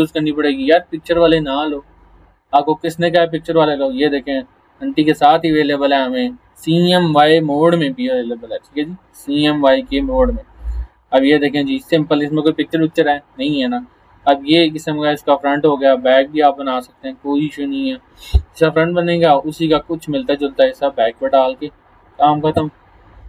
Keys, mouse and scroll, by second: 1.3-1.9 scroll up 1, 2.9 click, 5.6 scroll down 1, 6.7 scroll up 1, 9.9 scroll down 1, 10.4 scroll up 1, 11.3 scroll down 1, 17.3 scroll down 1, 18.9 scroll up 1, 21.1 click, 22.6 scroll down 1.